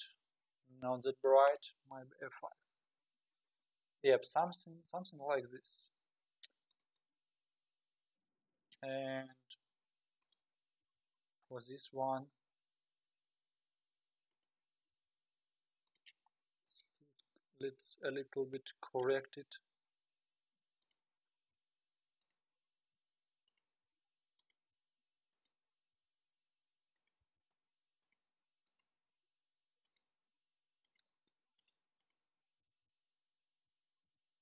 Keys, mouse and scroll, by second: 4.5-5.4 scroll up 5, 5.4-6.6 scroll down 3, 6.7-7.3 drag, 8.2 scroll down 3, 9.1 KP_3, 10.2 click, 10.8 g, 12.5 r, 14.9 g, 16.4 scroll up 2, 18.3 scroll down 1, 19.4 KP_7, 20.8 click, 21.5 g, 22.9 r, 23.9 g, 24.8 r, 25.9 r, 27.2 s, 28.3 g, 29.8-30.3 drag, 30.8 click, 31.6-32.1 drag, 32.6 s, 34.0 s.